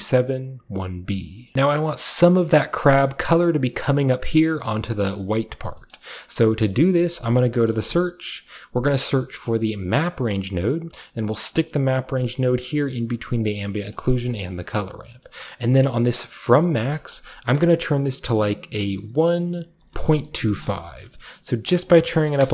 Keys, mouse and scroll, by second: 1.5-2.9 shift+middle drag, 1.5-2.7 shift+scroll up 2, 2.7-4.4 shift+scroll up 1, 3.1-4.5 shift+middle drag, 4.4 shift+scroll up 1, 4.4-5.2 scroll down 2, 4.7-5.8 middle drag, 5.2 click, 6.9 shift+click, 6.9 shift+middle click, 6.9-7.9 typing, 9.9 click, 11.6 click, 12.1-13.7 drag, 13.8-16.3 scroll up 1, 16.3 middle click, 16.3-17.7 scroll up 1, 16.5-18.6 drag, 17.7-18.2 scroll up 1, 18.2-18.6 scroll up 1, 20.6 Return, 20.6 typing, 21.7-22.5 drag, 21.9-22.5 typing.